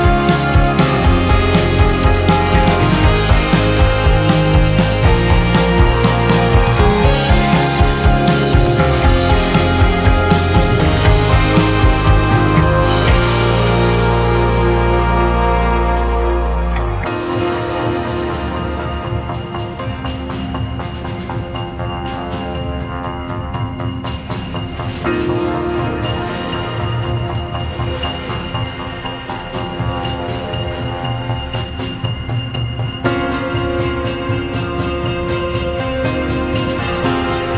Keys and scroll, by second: 2.7 space, 3.6 space, 7.5 space, 8.2 space, 10.4 space, 11.0 space, 14.6 space, 15.6 space, 16.6 2, 27.2 space, 28.9 space, 37.0 Escape.